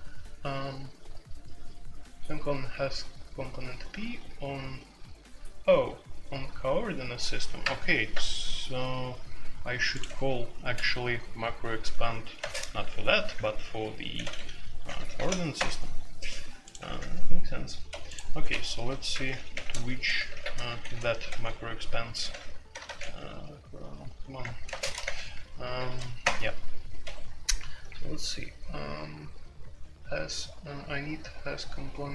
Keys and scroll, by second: 10.0 Escape, 12.3 space, 14.2-17.2 typing, 15.5 Return, 17.9 Escape, 18.6-27.0 typing, 20.3 alt+2, 25.0 shift+Insert, 27.0 Escape.